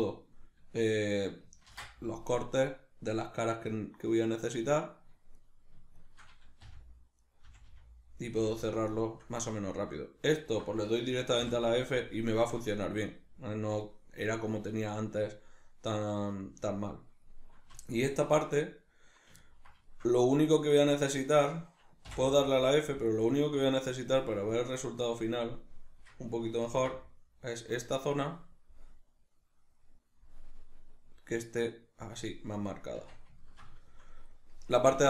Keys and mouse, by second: 1.7 ctrl+r, 5.4 right click, 6.0 shift+right click, 6.6 f, 7.2 right click, 7.4 f, 9.0-10.4 shift+middle drag, 10.4 alt+right click, 11.4 f, 16.7-17.8 shift+middle drag, 17.8 alt+right click, 19.4-23.1 ctrl+middle drag, 22.1 f, 23.1 alt+right click, 24.6 click, 26.6 ctrl+b, 32.1 click, 32.5-35.0 middle drag, 32.9 Tab.